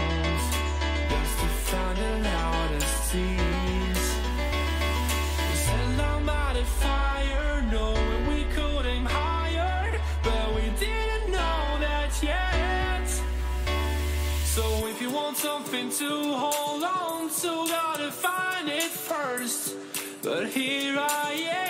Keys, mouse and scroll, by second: 4.1-6.1 drag, 4.6 a, 4.9 a, 6.1 b, 8.9 g, 20.8 a.